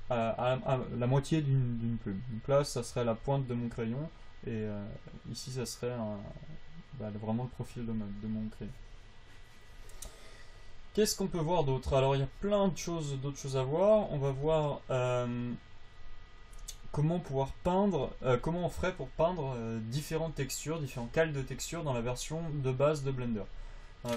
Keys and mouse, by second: 9.1-12.8 drag.